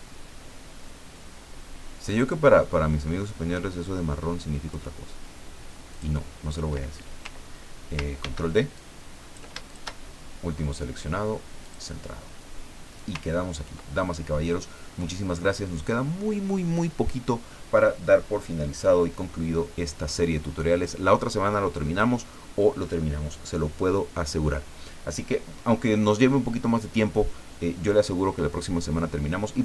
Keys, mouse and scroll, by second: 5.9 click, 8.2 ctrl+d, 8.7-10.0 ctrl+drag, 11.6 click, 13.3-13.7 ctrl+scroll down 2, 14.3 scroll up 2, 14.9 scroll up 2.